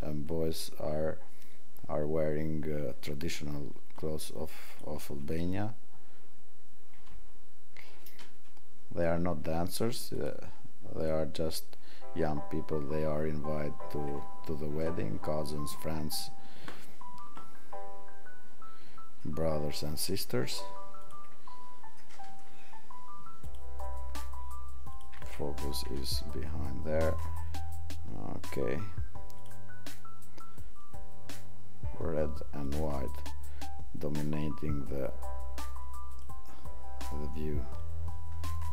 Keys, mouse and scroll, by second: 7.1 click, 21.0 click, 29.3 click.